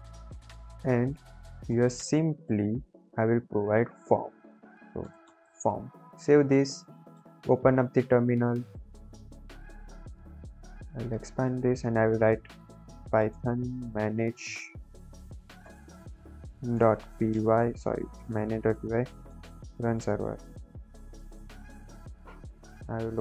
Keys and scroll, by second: 1.6 Return, 1.8 Return, 2.0 Return, 2.4 BackSpace, 3.0 shift+[, 3.6 Left, 4.3 shift+Right, 4.7-5.9 typing, 6.0 ctrl+s, 7.4 ctrl+`, 12.0-14.0 typing, 15.3-21.7 typing.